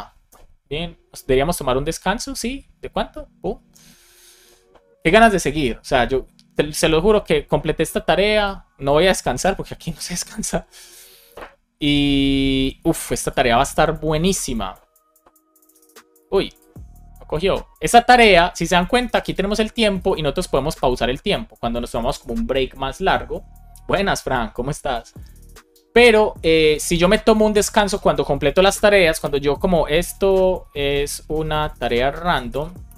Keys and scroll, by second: 29.1 Return, 30.0 shift+e, 30.6 space, 31.8 space, 32.8 Return.